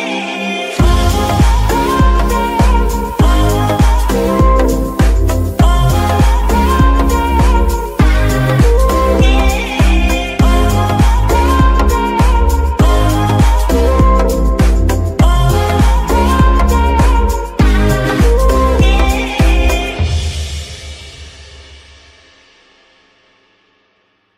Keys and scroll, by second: 0.1 ctrl+shift+c, 0.7 ctrl+shift+v, 1.5 ctrl+v, 5.6 shift+z, 22.2 g, 22.5 Escape, 23.7 shift+g, 24.0 Escape.